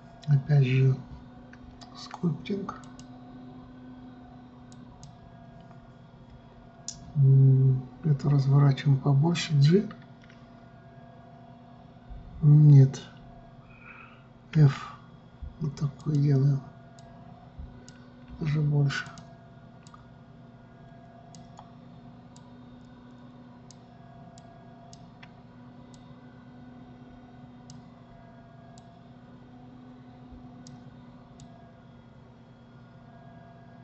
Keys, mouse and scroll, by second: 3.4-6.5 drag, 17.6-18.9 drag, 18.9 f, 20.5-33.8 drag.